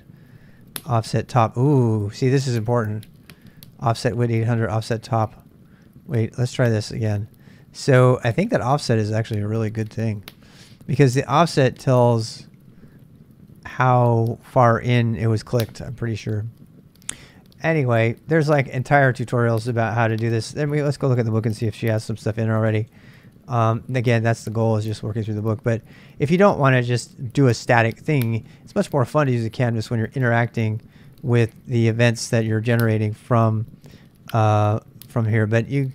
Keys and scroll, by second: 21.9 super+Tab, 22.9 super+Tab, 28.4 super+Tab.